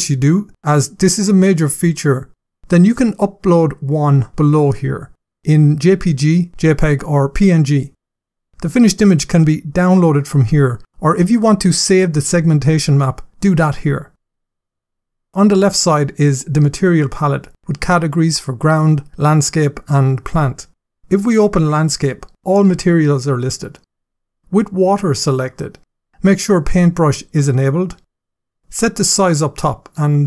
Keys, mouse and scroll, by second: 1.1-2.6 scroll down 7, 13.2 scroll up 1, 14.1-14.8 scroll up 6, 18.2 click, 19.1 click, 19.9 click, 21.4 click, 24.5 click, 27.0 click, 29.0 click.